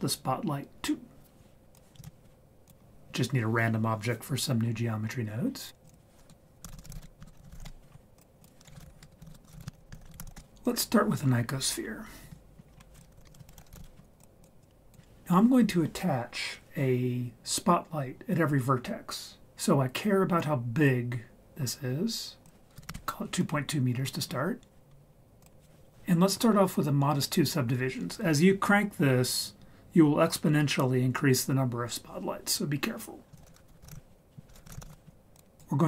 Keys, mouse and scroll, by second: 1.7 click, 2.0 shift+a, 5.8-7.7 drag, 6.7 l, 8.2 click, 8.4 shift+click, 9.0 BackSpace, 9.2 l, 10.7 click, 12.2 a, 12.4 KP_Decimal, 12.6 scroll up 1, 12.7-13.1 scroll down 3, 13.2 ctrl+x, 13.3 click, 13.5 shift+a, 14.6 drag, 22.4 click, 23.9-25.4 scroll up 4, 25.4 click, 33.2 click, 33.4 shift+a.